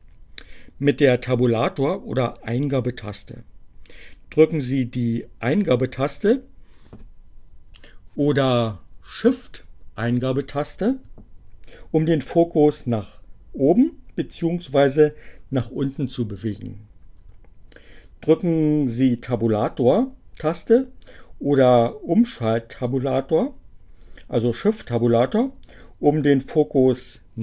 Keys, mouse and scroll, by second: 6.7 Return, 9.4 shift+Return, 10.4 shift+Return, 11.9 Return, 15.8 shift+Return, 27.1 Tab.